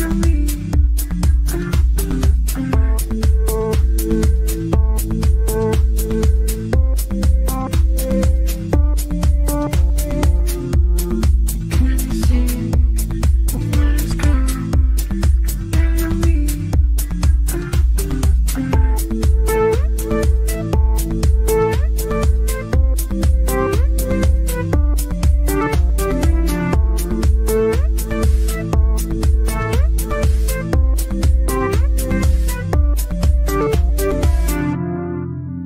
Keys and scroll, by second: 12.6 shift+F2, 13.1 Escape, 22.8 ctrl+z, 25.0 w, 29.1 f, 33.1 g.